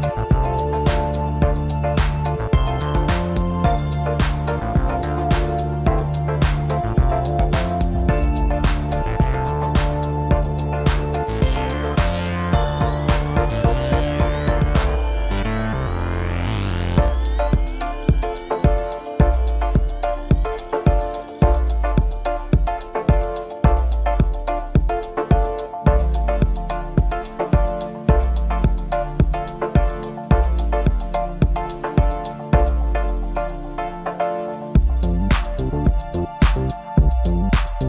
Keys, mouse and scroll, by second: 1.3 KP_7, 2.8 g, 5.0 ctrl+z, 6.5 s, 9.8 s, 12.4 s, 15.8 s, 19.5 KP_1, 20.5-21.9 scroll up 4, 21.9 s, 24.6 s, 28.4-29.2 scroll down 3, 29.3 g, 34.0-36.7 middle drag, 36.7 g.